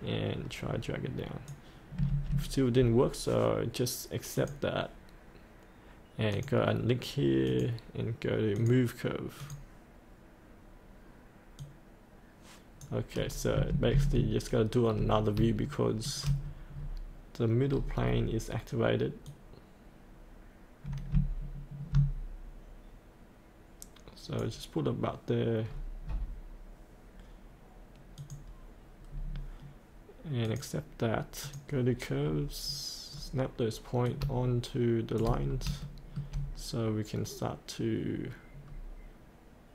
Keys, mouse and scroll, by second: 4.3-12.9 drag, 14.9-15.3 scroll up 1, 15.6 shift+scroll down 1, 16.4-17.9 scroll down 1, 19.3-25.2 drag, 25.6-27.1 scroll down 1, 27.2-28.1 scroll down 1, 28.1 click, 29.1-30.4 scroll up 1, 30.4 click, 32.2-34.0 scroll down 1, 34.0 click, 35.5 scroll up 1, 35.8 shift+middle click, 38.0-38.6 scroll up 1, 38.6-39.7 scroll down 1.